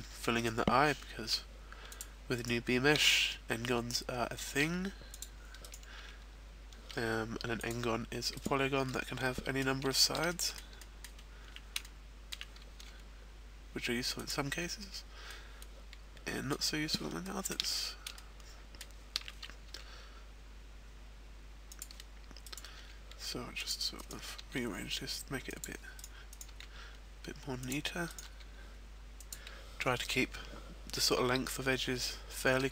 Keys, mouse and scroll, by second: 0.3 right click, 1.4 e, 2.0 click, 2.4 right click, 3.0 e, 5.1 click, 5.5 right click, 6.0 e, 7.6 click, 8.4 right click, 8.9 middle click, 9.9 shift+middle click, 10.3 middle click, 10.9 middle click, 11.1-11.8 scroll up 1, 11.8 middle click, 11.8 scroll up 1, 12.9 g, 14.6 click, 14.6-15.2 scroll down 3, 15.3 middle click, 16.7-17.1 scroll up 1, 17.3 shift+middle click, 17.7-18.0 scroll up 1, 18.0 shift+middle click, 19.8 g, 21.8 click, 22.4 right click, 24.6 g, 25.6 click, 25.9 right click, 26.4 right click, 26.6 g, 27.8 click, 28.1 right click, 28.4 g, 29.3 click, 31.0 middle click.